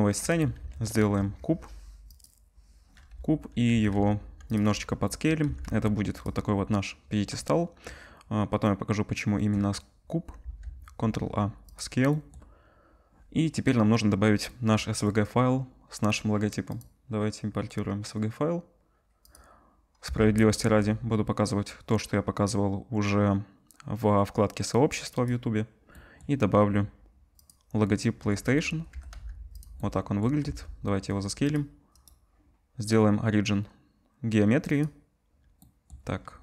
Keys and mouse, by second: 0.6 ctrl+s, 1.0 shift+a, 3.3-4.6 drag, 3.7 s, 4.6-8.6 middle drag, 5.4 s, 10.4 ctrl+a, 14.6-16.7 middle drag, 16.7-25.3 drag, 25.3-28.9 middle drag, 28.9 g, 29.7-32.0 middle drag, 30.4 s, 32.0-36.4 drag.